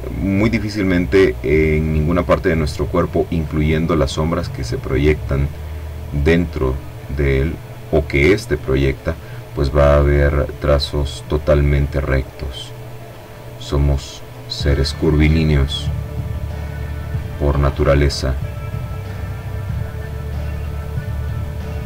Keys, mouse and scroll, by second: 1.2-2.5 drag, 2.9 click, 3.9 click, 6.1 click, 8.0-9.0 drag, 9.1 click, 10.1-11.3 drag, 11.7-13.5 drag, 13.7-15.6 drag, 16.2-18.4 drag, 19.3-20.8 drag.